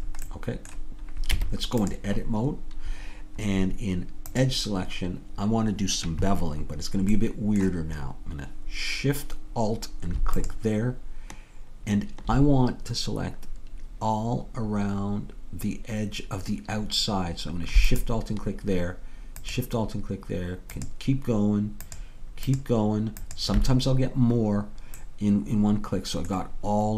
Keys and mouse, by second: 1.4 Tab, 4.6-10.1 drag, 10.4-15.8 drag, 23.9-25.4 drag.